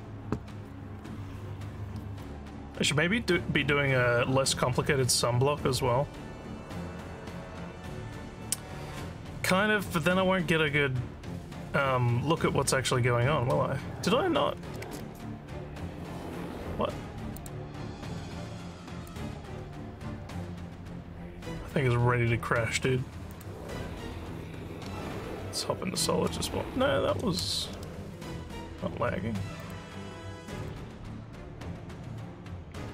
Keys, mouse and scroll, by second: 17.4 click, 19.1 click, 23.3 click, 25.0 z, 26.7 z, 29.6 click, 30.6 click.